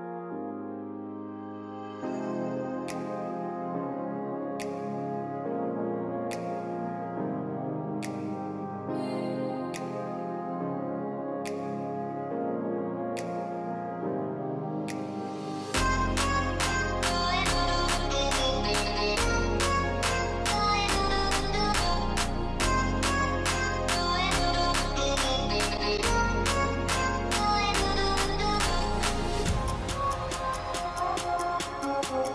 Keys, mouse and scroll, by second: 0.6 alt+scroll up 1, 3.9 ], 4.4 double click, 6.2 double click, 9.0 double click, 12.0 alt+scroll, 12.1 alt+scroll down 1, 15.4 alt+scroll up 1, 18.4 alt+scroll down 1, 20.6 ctrl+click, 20.6 alt+scroll down 1.